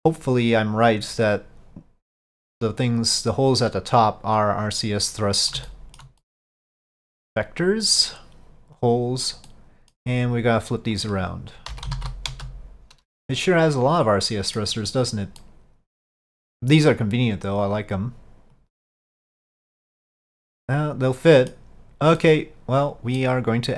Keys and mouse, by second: 0.0 click, 2.5 click, 3.7-5.3 drag, 5.7 shift+middle click, 6.3 middle click, 7.4-8.9 drag, 9.6 middle click, 11.1-12.7 drag, 13.2-14.7 middle drag, 15.6-16.3 middle drag, 17.8 click, 19.3-21.6 middle drag, 22.2-23.3 middle drag.